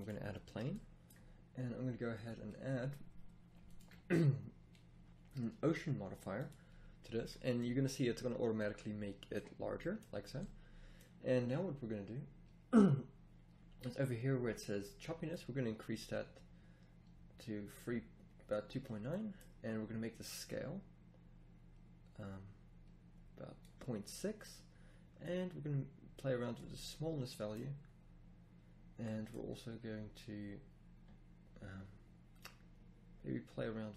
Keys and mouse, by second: 6.9 middle click, 7.6 middle click, 7.9 middle drag, 8.2-8.5 middle drag, 14.2 middle click, 20.4 click, 20.6 click, 26.7 drag, 27.2 click.